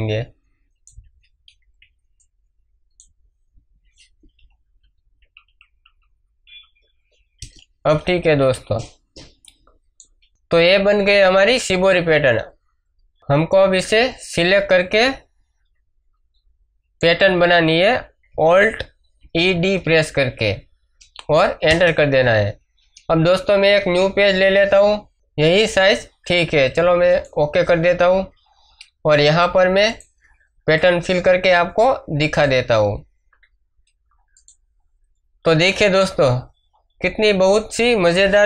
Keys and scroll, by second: 1.1 space, 3.1 space, 4.3 Up, 7.3 Return, 8.4 ctrl+d, 8.5 ctrl+space, 9.0 ctrl+space, 19.1 alt+e, 19.5 alt+d, 21.6 Return, 23.7 ctrl+n, 35.5 ctrl+space, 36.1 ctrl+space.